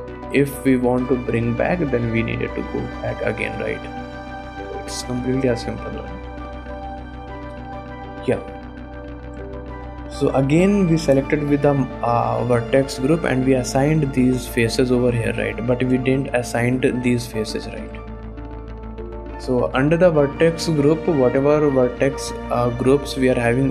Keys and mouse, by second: 0.2 shift+click, 1.5-2.6 drag, 4.5 middle click, 4.8 shift+middle click, 5.6 middle click, 6.0 a, 6.1 KP_Decimal, 6.7 KP_1, 7.3 click, 7.6 shift+middle click, 7.8 click, 8.3 click, 8.4 shift+middle click, 9.4 Tab, 13.9-15.2 drag, 15.2 middle click, 15.7 middle click, 16.2 shift+middle click, 17.9 Tab, 20.9 click, 22.2 click.